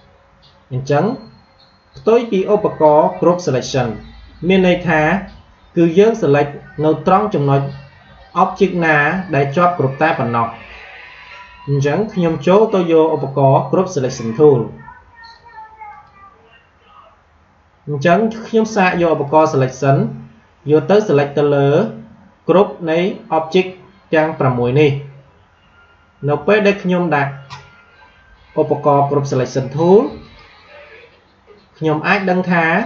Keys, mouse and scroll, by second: 8.7 click, 14.2-18.0 drag, 19.2 click, 19.8 click, 30.2 click.